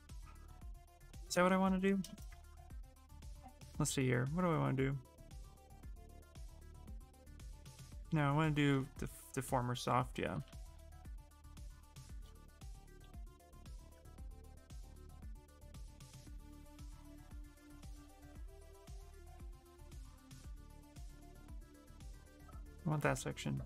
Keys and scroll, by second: 2.1 ctrl+z, 10.1 x.